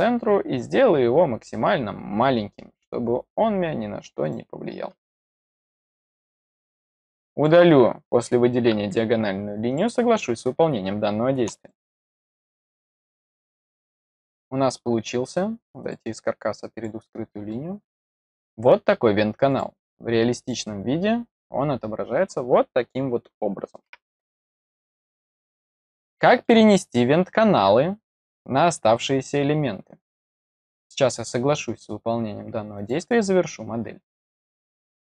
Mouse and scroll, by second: 0.1-0.7 scroll up 3, 4.2 click, 4.8-5.3 scroll down 2, 7.1-7.4 drag, 9.6 click, 10.7-11.0 scroll down 4, 11.6-12.6 middle drag, 13.0-13.4 middle drag, 13.7 click, 14.3 middle click, 15.7 click, 16.7 click, 17.4 middle click, 19.4 click, 20.3 click, 24.8-26.4 middle drag, 27.9 click, 32.7 click.